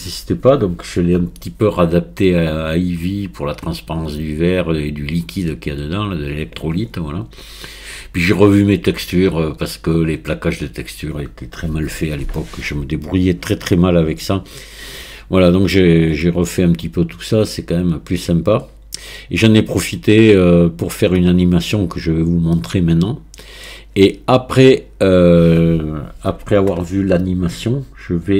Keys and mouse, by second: 16.3-21.0 middle drag, 22.6-23.7 middle drag.